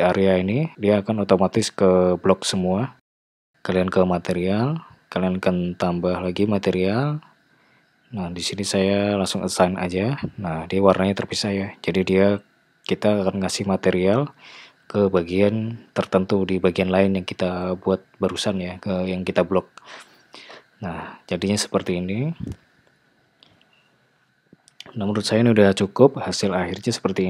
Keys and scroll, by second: 9.5 Tab.